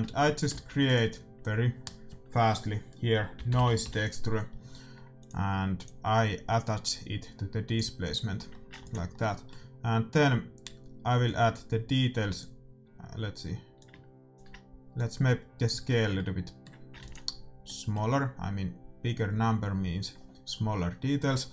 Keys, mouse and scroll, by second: 0.4 shift+a, 6.8-8.4 drag, 8.4-10.9 middle drag, 8.7 ctrl+s, 11.3-13.1 drag, 13.7-16.6 drag, 16.2 middle click, 17.0 ctrl+s.